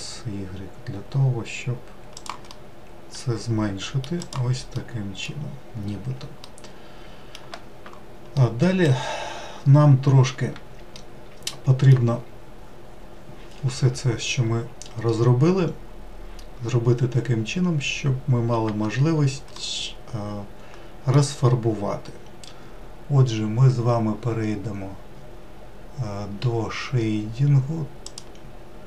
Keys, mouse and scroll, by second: 2.2-3.9 middle drag, 3.9 click, 4.4 middle click, 5.2-6.1 scroll down 5, 6.1-8.8 middle drag, 8.8-9.5 scroll down 1, 9.5-10.6 scroll down 1, 10.6-13.8 middle drag, 18.4 Tab, 19.3-22.4 middle drag.